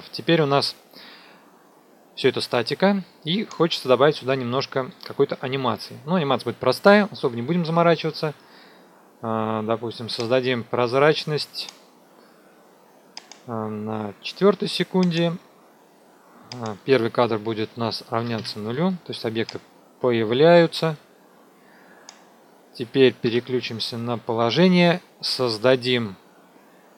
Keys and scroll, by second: 18.1 KP_0, 18.3 Return, 23.2 p.